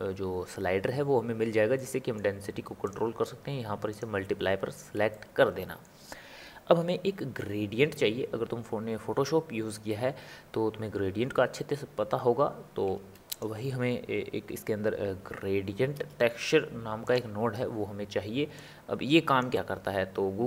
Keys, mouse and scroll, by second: 1.7-2.8 middle drag, 2.8-5.1 drag, 5.1-8.2 middle drag, 12.9 shift+a, 18.5 click.